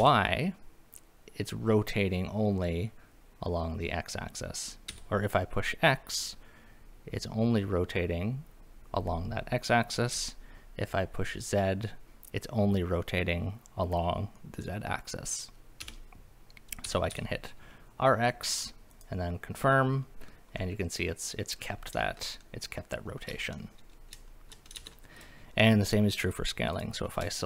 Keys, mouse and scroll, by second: 0.0 y, 4.9 x, 10.1 z, 15.8 Escape, 16.9 r, 17.1 x, 18.9 click, 20.6-21.7 middle drag, 22.4-23.0 middle drag, 23.1 scroll down 1, 24.3 shift+middle drag, 24.8 ctrl+z, 25.2 click, 25.5-26.3 scroll up 2, 26.7 click, 27.3 shift+middle drag.